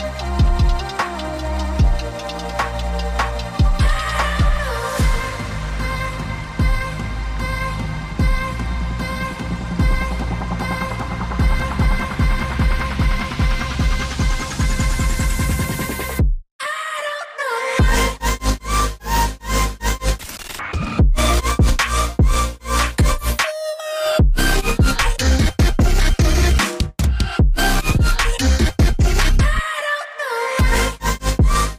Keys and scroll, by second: 1.8 g, 22.0 ctrl+h.